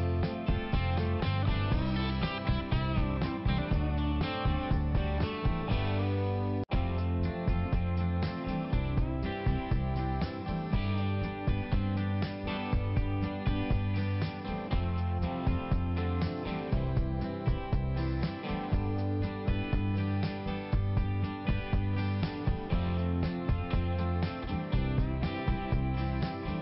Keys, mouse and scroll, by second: 0.5 click, 1.2 click, 2.8 click, 3.7 click, 4.6 click, 5.5 click, 6.1 click, 7.0 click, 8.5 click, 9.5 click, 10.4 click, 12.7 click, 14.1 ], 14.2 click, 15.6 click, 16.8 click, 18.1 click, 19.1 click, 20.5 click, 21.9 click, 22.8 click, 23.7 click, 24.6 click, 25.2 click, 26.0 click.